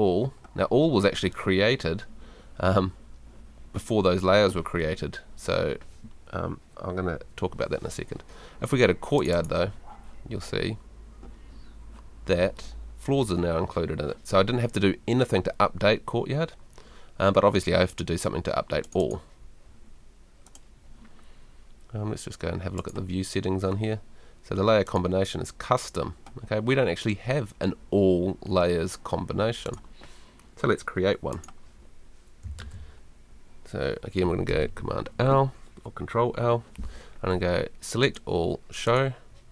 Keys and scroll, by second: 34.5 super+l.